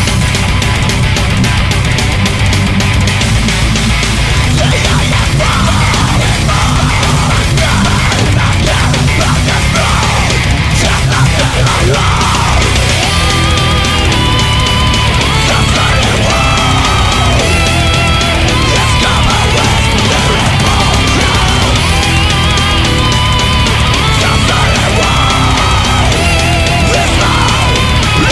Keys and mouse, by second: 0.4 right click, 1.1 ctrl+z, 1.9 right click, 4.3 right click, 5.5 right click, 8.2 ctrl+z, 9.0 ctrl+z, 12.0 right click, 12.3 right click, 13.2 ctrl+z, 13.6 right click, 13.8 ctrl+z, 14.0 right click, 14.2 ctrl+z, 15.9 right click, 16.7 ctrl+z, 18.3 ctrl+z, 20.2 ctrl+z, 20.4 ctrl+z, 20.8 right click, 25.0 right click, 25.3 ctrl+z, 27.1 ctrl+z, 27.7 ctrl+z, 27.9 ctrl+z.